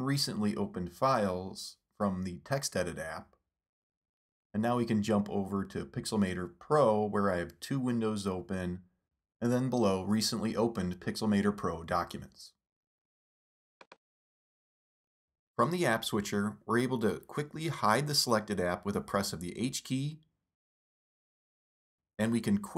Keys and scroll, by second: 2.7 super+Tab, 4.8 super+Right, 6.0 super+Up, 16.1 super+Tab, 18.4 super+Tab, 21.1 super+h.